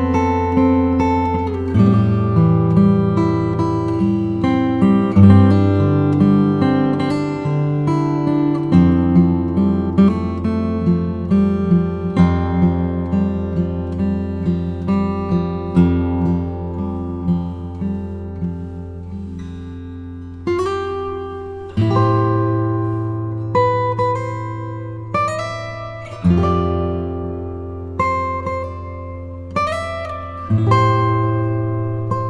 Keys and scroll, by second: 5.4 space, 27.0 shift+Up.